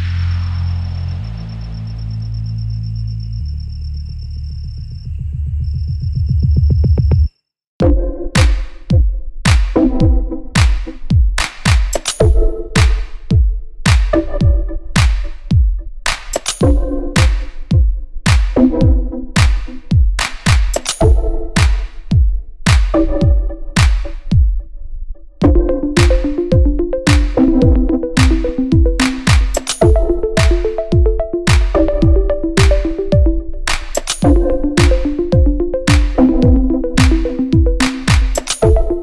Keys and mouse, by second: 0.8-6.0 drag, 3.6 shift+d, 5.5 s, 6.0 middle click, 6.6-12.5 drag, 10.5 s, 11.5 s, 12.5-39.0 middle drag, 13.9 KP_1, 14.0 KP_3, 14.7 shift+d, 15.3 r, 16.5-19.3 typing, 20.5 s, 22.7 g, 26.3 z, 26.9 click, 27.6 g, 29.0-32.7 typing, 34.4 g, 38.2 r.